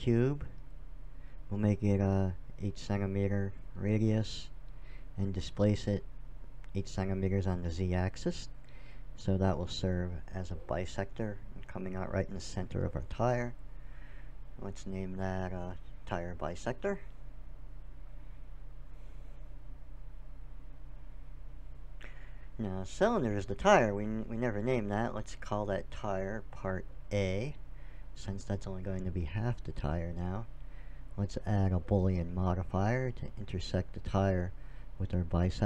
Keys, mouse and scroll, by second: 1.9 middle click, 2.5-4.4 drag, 6.5-8.4 drag, 11.7-15.2 middle drag, 16.5-18.5 drag, 23.0-25.9 drag, 30.8-32.6 drag, 34.4-35.6 drag.